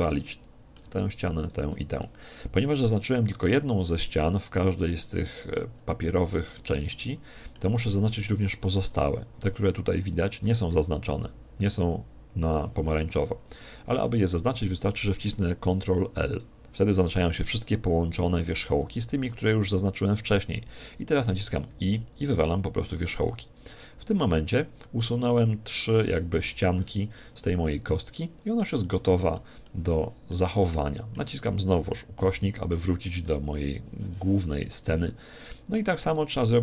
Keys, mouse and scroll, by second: 5.7-8.8 middle drag, 8.8-10.6 scroll up 1, 10.6 scroll up 1, 10.7 z, 14.2-16.1 scroll down 1, 16.1 ctrl+l, 16.1 middle click, 20.4-22.0 middle drag, 21.7 x, 23.2 Tab, 24.2 z, 25.0-32.2 middle drag, 32.2 KP_Divide, 35.1-36.6 middle drag, 36.2 right click.